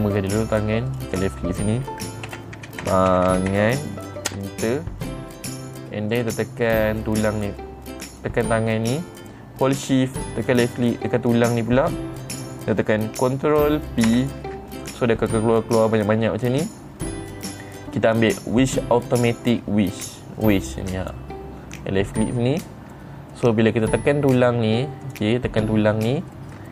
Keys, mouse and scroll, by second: 0.4-0.7 scroll down 1, 1.4 click, 1.6 click, 6.6 click, 7.8 middle click, 8.7 click, 11.3 shift+click, 14.6 ctrl+p, 21.5 click, 22.8 middle click, 23.8 middle click, 24.9 click, 25.6 click.